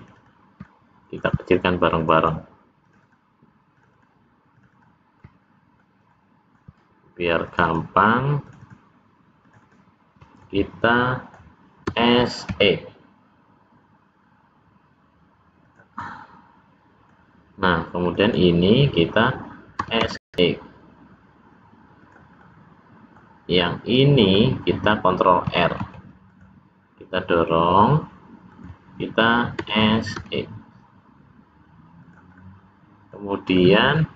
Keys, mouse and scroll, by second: 0.0 shift+click, 0.2 shift+click, 0.6 middle click, 2.0 shift+click, 2.2 shift+click, 2.9 shift+click, 3.1 shift+click, 3.7 shift+click, 4.0 shift+click, 4.5 shift+click, 4.8 shift+click, 5.2 shift+middle click, 6.1 middle click, 7.5 shift+click, 7.7 shift+click, 8.5 shift+click, 8.7 shift+click, 9.5 shift+click, 9.7 shift+click, 10.4 middle click, 11.9 s, 16.0 middle click, 18.0 click, 18.3 click, 19.8 s, 22.3 middle click, 23.5 scroll up 1, 23.6 middle click, 25.7 ctrl+r, 29.5 s, 32.3 middle click, 33.5 middle click, 34.1 scroll up 1.